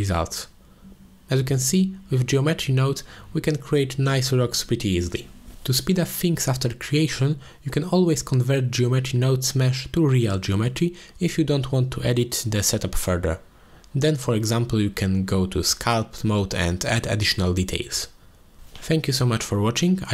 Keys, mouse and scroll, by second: 0.0-0.4 drag, 3.1 ctrl+j, 3.4 click, 4.2-5.3 drag, 6.5 ctrl+j, 6.8 click, 8.2 click, 8.9 F2, 12.6 middle click, 13.1 click, 13.8 F2, 16.9 ctrl+s, 17.9 middle click, 18.4 click, 18.8 middle click.